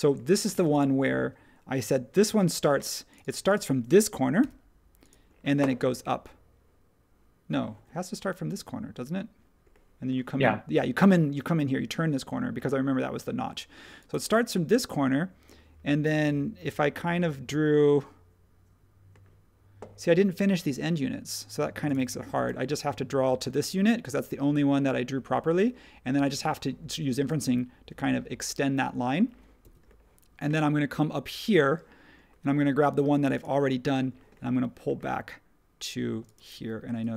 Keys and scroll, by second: 7.7 ↺, 29.6 ↻, 36.5 e.